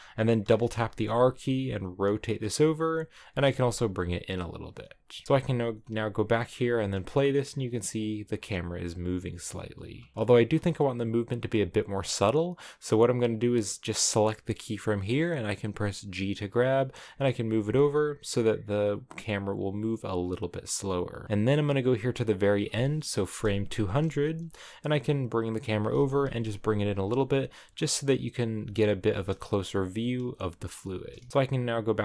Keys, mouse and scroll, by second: 0.4 r, 3.1 g, 3.2 g, 5.1 r, 5.6-6.7 drag, 6.7 space, 10.0 click, 10.4 space, 11.5-12.8 drag, 12.8 right click, 14.7 g, 17.0 space, 20.7 scroll down 2, 21.1 space, 22.2-25.5 drag, 25.5 g, 25.7 g, 27.6 g, 28.5 g, 29.0 r, 30.3 g, 31.1 g, 31.3 space.